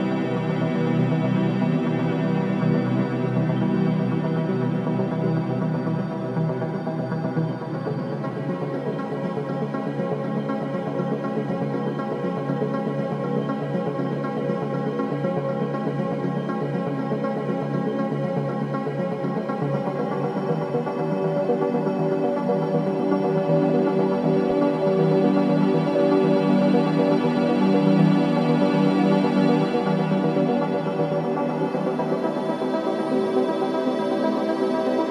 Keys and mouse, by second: 1.6-5.6 drag, 4.6 Delete, 7.1 Delete, 11.8 click, 12.0 Tab, 14.0-17.3 drag, 19.9 click, 20.5 3, 21.8 click, 22.7 click, 24.0 click, 28.5-29.0 drag, 29.4-33.0 alt+drag, 30.1 Tab, 33.6 3, 35.0-35.1 drag.